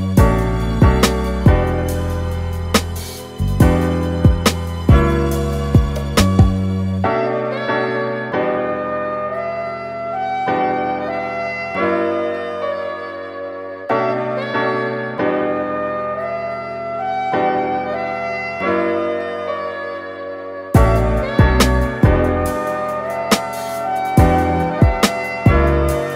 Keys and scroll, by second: 0.2 super+t, 2.9 Return, 7.7 super+z, 10.7 super+z, 19.5 super+z.